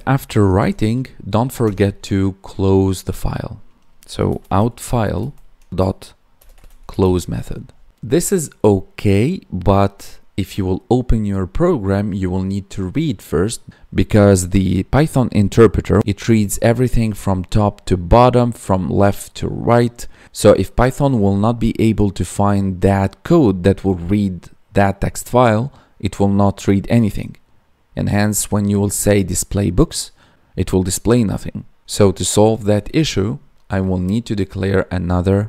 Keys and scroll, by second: 6.9 ctrl+s.